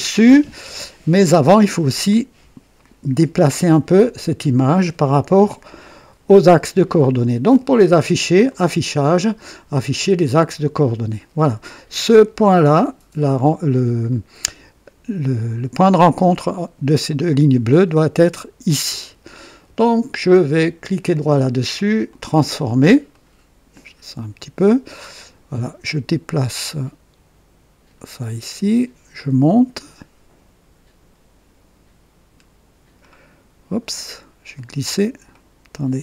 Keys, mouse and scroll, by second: 8.4 click, 10.4 click, 14.0-14.5 scroll up 2, 20.8 right click, 22.1 click, 23.1 right click, 25.1-28.1 drag, 29.1-33.1 drag, 33.9-34.2 scroll up 2, 34.5 right click, 35.3 right click, 35.7-36.0 right drag.